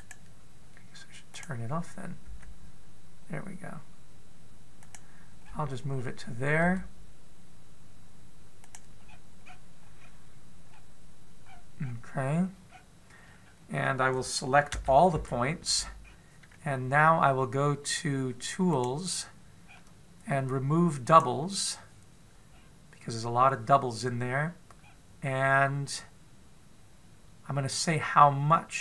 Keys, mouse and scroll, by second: 2.1 click, 3.0 g, 6.2-7.5 scroll up 5, 7.5 scroll up 2, 7.5 g, 9.8-10.9 scroll down 11, 11.5-12.3 scroll down 1, 12.3 scroll down 2, 13.5-14.0 scroll down 1, 14.0 scroll down 1, 14.2-14.6 scroll up 1, 14.6-15.0 scroll down 1, 15.5 a, 15.9 a, 16.8-17.3 scroll down 3, 19.5 click, 21.8 click, 21.8 scroll down 5, 23.3-23.8 scroll down 3, 25.6-27.7 scroll down 2, 27.7 scroll down 2, 28.5 click.